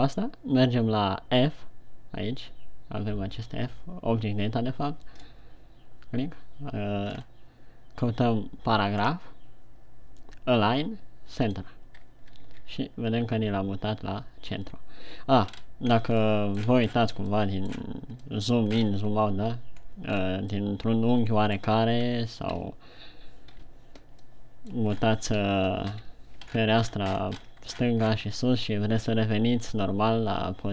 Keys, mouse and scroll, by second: 5.6 click, 7.7-9.1 scroll down 2, 9.4 scroll down 2, 11.8 click, 12.9 shift+c, 15.9-16.5 scroll up 3, 16.5 scroll down 2, 16.8 middle click, 17.2-17.7 scroll down 7, 17.8 middle click, 18.3 scroll down 1, 18.7 middle click, 19.3 scroll up 4, 20.2 scroll down 1, 20.6 scroll up 2, 21.1 middle click, 22.5 scroll up 1, 23.0 KP_3, 24.0 KP_1, 24.7 middle click, 25.4 scroll down 4, 26.5 KP_1, 26.8 ctrl+scroll up 1, 26.9 ctrl+scroll down 2, 27.3-28.0 ctrl+scroll up 11, 28.3-28.8 shift+scroll down 5.